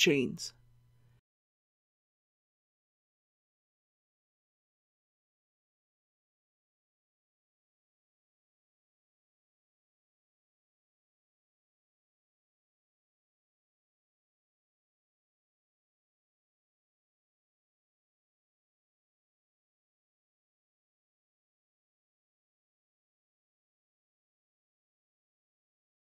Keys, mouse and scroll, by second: 9.2 scroll up 1, 9.4 shift+middle click, 10.2 i, 10.8 z, 11.0 KP_4, 12.5 alt+a, 12.9 alt+b, 13.3 click, 14.7 x, 14.7 click, 15.4 z, 15.6 KP_6, 17.5-19.1 typing, 19.9 click, 20.2-21.3 middle drag, 21.6-22.5 typing, 23.8 click, 24.8-26.0 typing.